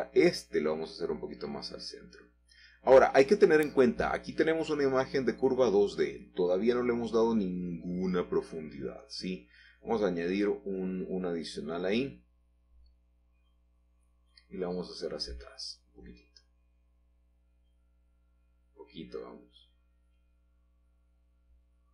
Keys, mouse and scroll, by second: 0.5 g, 1.6 x, 4.4 click, 7.5 shift+click, 8.3 middle click, 10.2-11.3 drag, 11.7 f, 12.3 Escape, 12.5 Escape, 12.6 Escape, 14.1 g, 15.0 x.